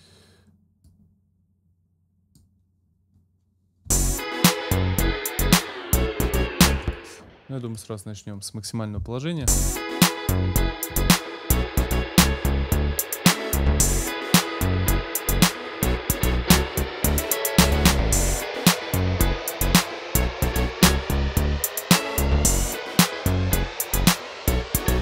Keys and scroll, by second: 0.0 shift+Up, 3.9 space, 6.8 space.